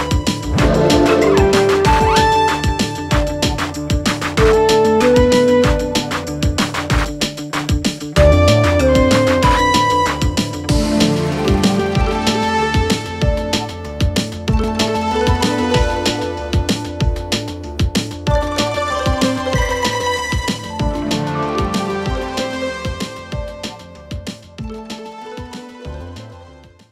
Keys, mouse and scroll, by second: 3.1 shift+space, 5.8 ctrl+shift+,, 7.9 click, 8.7-9.3 shift+click, 9.7-10.3 shift+click, 11.9-12.3 click, 15.4-16.1 alt+scroll down 2, 16.1 click, 17.4-18.6 alt+scroll up 2, 21.0 alt+scroll up 1.